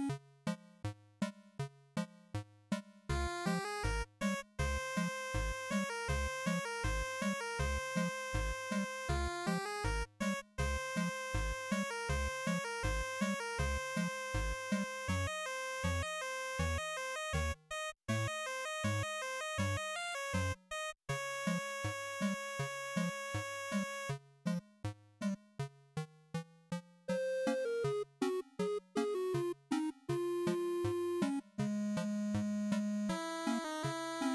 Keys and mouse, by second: 3.5 click, 17.0-19.8 drag, 21.5-25.2 drag, 26.2-34.3 drag.